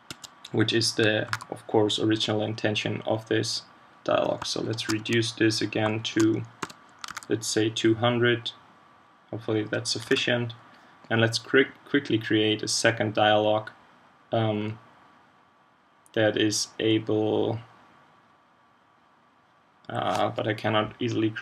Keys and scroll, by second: 1.2 super+q, 7.1 super+s, 10.1 super+w.